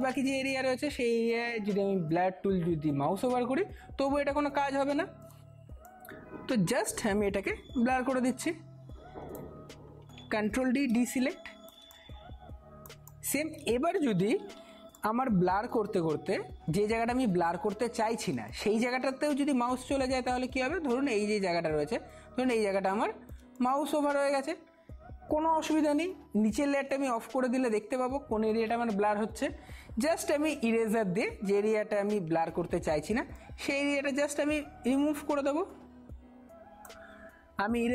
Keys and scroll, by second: 10.5 ctrl+d, 11.1 ctrl+space, 14.1 [, 18.5 space, 32.2-32.7 typing.